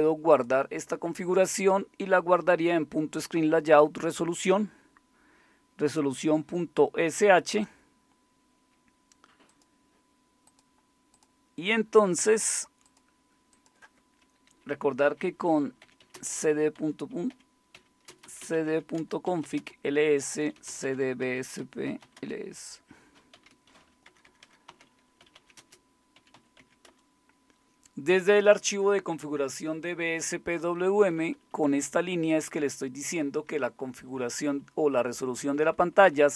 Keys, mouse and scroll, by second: 7.5-15.8 drag, 15.6-26.8 typing, 30.6 Down, 30.8 Down, 31.0 Down, 31.1 Down, 31.3 Down, 31.5 Down, 31.6 Down, 32.3 Down, 32.3-33.3 Right, 34.2 Right, 34.6 Right, 35.5 Right, 35.7 Right, 35.9 Right.